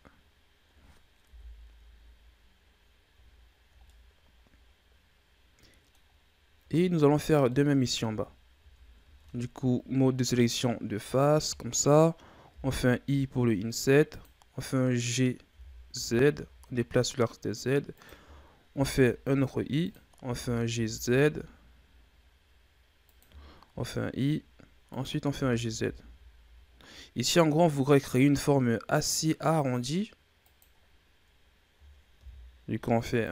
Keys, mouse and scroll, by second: 1.2 KP_1, 3.3-3.8 scroll down 2, 3.8-6.6 middle drag, 6.6-7.0 scroll down 5, 7.0-7.4 scroll up 2, 7.4 middle click, 7.9 Tab, 8.5 Tab, 9.1 ctrl+Tab, 11.0 right click, 15.4 g, 20.1 g, 24.4 i, 25.2 g.